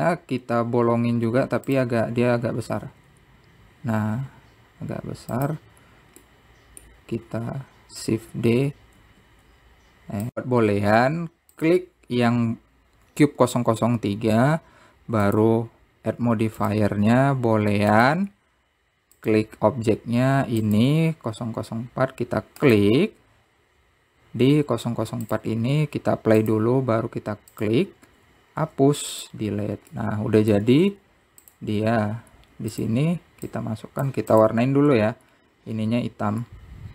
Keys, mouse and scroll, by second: 0.5 s, 3.4-4.0 scroll down 2, 4.0-6.0 middle drag, 6.0 shift+d, 8.5 click, 12.7 click, 16.4 click, 17.8-20.5 drag, 23.7 click, 26.4 click, 27.6-28.8 drag, 29.8 x, 31.1-32.2 middle drag, 33.9 click, 34.7 click, 35.5 click, 36.1 b.